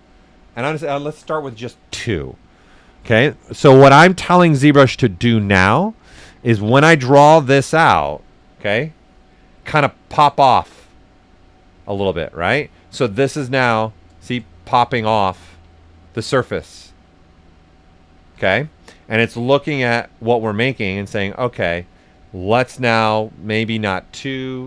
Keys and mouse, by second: 1.9 Return, 8.6 click, 9.6-11.2 right drag, 11.9 ctrl+z, 12.2 right click, 13.0 click, 13.7 right click, 14.5 right click, 15.7 right click, 16.3 right click, 17.0 right click, 18.2 ctrl+z, 18.6 right click, 19.2 click, 20.1 right click, 21.2 z, 22.4 click.